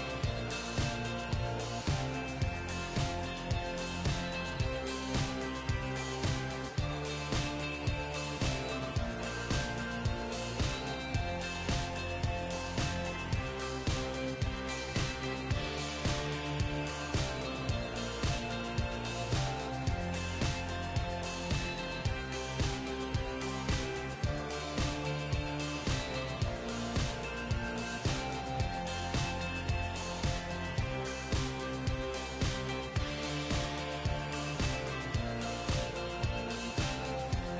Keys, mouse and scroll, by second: 0.8 g, 1.5-4.9 middle drag, 2.3-4.5 right drag, 3.3 g, 5.6-7.1 middle drag, 7.4 g, 11.7 g, 16.4 g, 17.7 middle click, 18.3 g, 19.8-22.0 right drag, 20.5-22.8 middle drag, 21.3 g, 23.8-25.2 middle drag, 24.8 g, 26.3-29.9 right drag, 26.8 g, 28.4 g, 30.5 g, 32.4 g, 33.9-36.9 right drag, 33.9 g, 35.1 g, 36.5 click, 37.0 g.